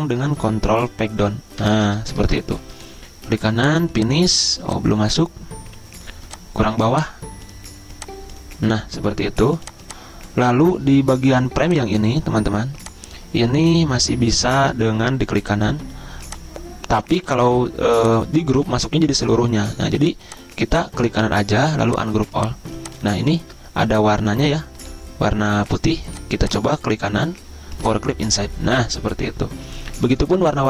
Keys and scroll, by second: 1.9 ctrl+Page_Down, 19.0 ctrl+z.